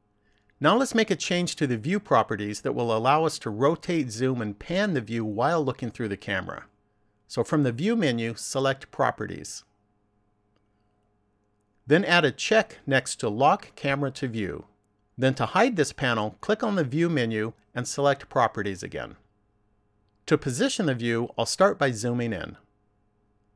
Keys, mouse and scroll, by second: 8.7 click, 12.9 click, 16.6 click, 18.8 click, 22.0-23.5 scroll up 4.